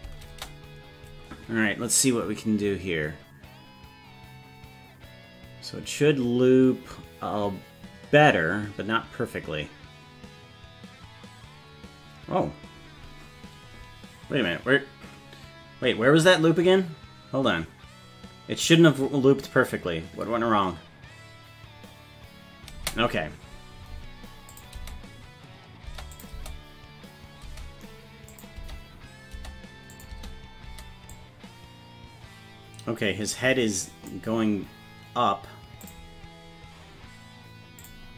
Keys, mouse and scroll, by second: 0.3 space, 22.8 space, 24.6 click, 24.8 space, 25.9 space, 26.2 click, 26.3 space, 27.5 space, 28.3 click, 28.6 space, 29.4 space, 30.0 click, 30.1 space, 30.7 space, 31.2-34.1 drag, 35.8 click, 37.8 click.